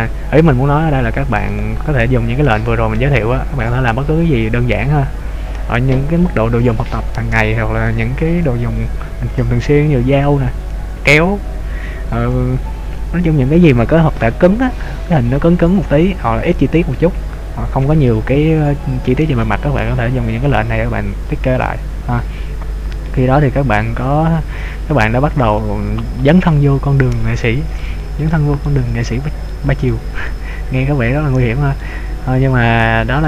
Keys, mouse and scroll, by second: 0.6-1.7 scroll up 4, 1.7 right click, 4.1-4.5 scroll down 3, 5.0-7.2 scroll down 2, 22.9-24.0 scroll down 4, 24.0-24.3 scroll up 2, 24.3-24.7 scroll down 1, 24.7 scroll up 1, 24.8 scroll down 1, 24.9-26.3 scroll up 6, 26.3-26.6 scroll up 2, 27.9 shift+middle click, 28.8 middle click, 29.9 shift+middle click, 31.1-32.1 scroll down 3, 32.1 middle click.